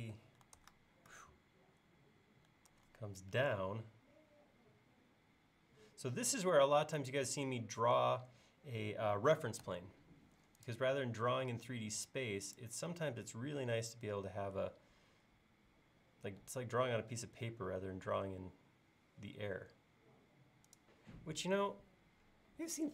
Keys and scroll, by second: 0.6 super+Tab, 2.7 super+Tab, 9.7 a.